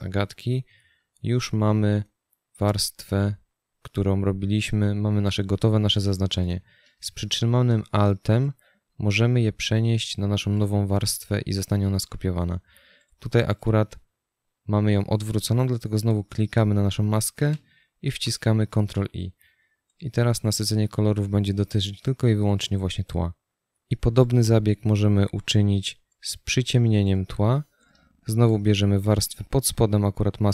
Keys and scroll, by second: 18.4 ctrl+i.